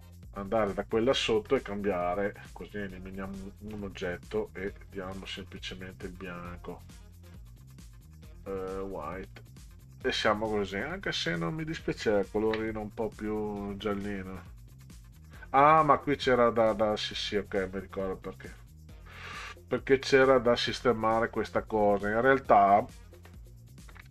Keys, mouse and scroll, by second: 2.1 click, 3.2-4.1 drag, 5.2 click, 7.4 scroll down 2, 9.2 click, 12.4 ctrl+z, 14.8-15.2 middle drag, 18.4 click, 23.9 ctrl+z.